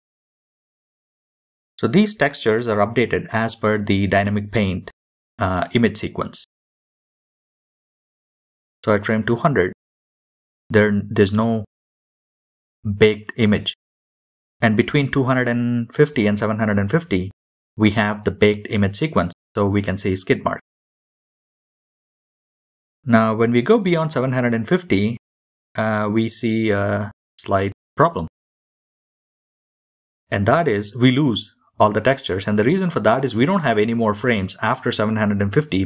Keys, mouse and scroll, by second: 28.7 shift+middle click, 32.2-35.1 shift+middle drag, 32.2 scroll down 4.